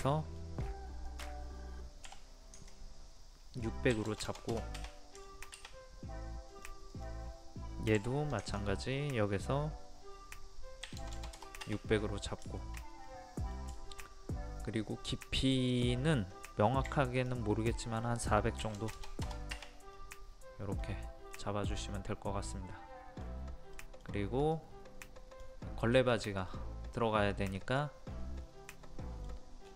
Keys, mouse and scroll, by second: 0.1 middle click, 1.1 click, 2.6 ctrl+click, 3.9 KP_6, 5.3 shift+middle click, 6.5 click, 8.0 m, 8.5 ctrl+click, 10.9 KP_6, 11.9-12.4 scroll down 1, 12.4 middle click, 13.8 shift+middle click, 15.3-15.7 scroll up 1, 15.7 click, 16.9 p, 17.2 click, 18.6 KP_4, 20.0 middle click, 20.8-21.3 scroll down 1, 21.3-23.6 middle drag, 24.5 click, 26.1 middle click, 27.5 scroll up 1, 28.7 middle click, 29.6 scroll down 1.